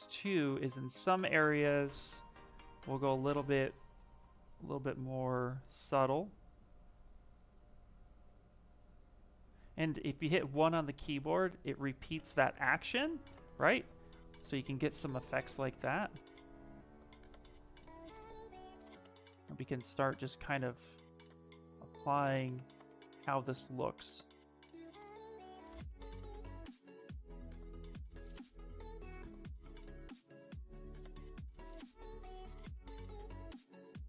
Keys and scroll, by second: 0.4 s, 20.4 s, 25.7 1.